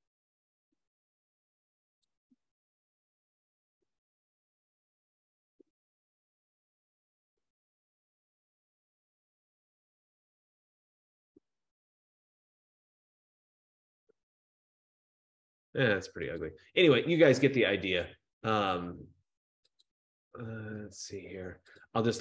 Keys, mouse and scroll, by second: 1.4 scroll, 2.3 click, 4.8 click, 8.6 click, 10.3-13.6 drag, 14.3 click, 16.5 click, 18.9 click, 20.0 click, 21.9 click.